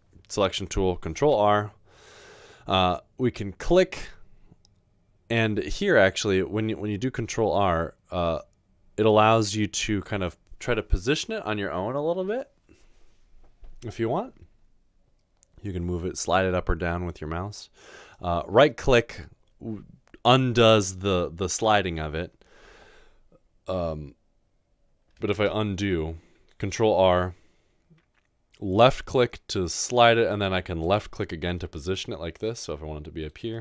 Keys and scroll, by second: 1.2 ctrl+r, 25.4 ctrl+z, 26.7 ctrl+r.